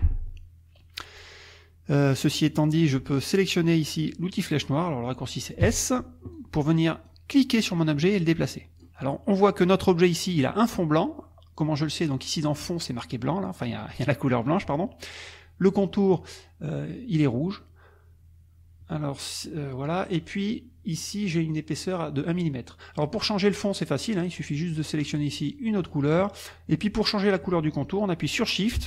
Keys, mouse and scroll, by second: 5.6 s, 6.4-9.0 drag, 24.7 click, 25.1 click, 25.5 click, 25.8 click.